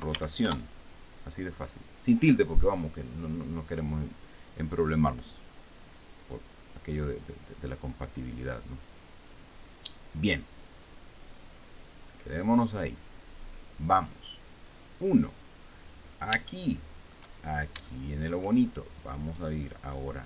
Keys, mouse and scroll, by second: 0.0-1.3 typing, 1.6 Return, 14.0 click, 15.4 click, 16.6-16.9 scroll down 1, 17.1 shift+middle click, 18.0-18.4 shift+scroll up 2, 18.5 shift+middle click.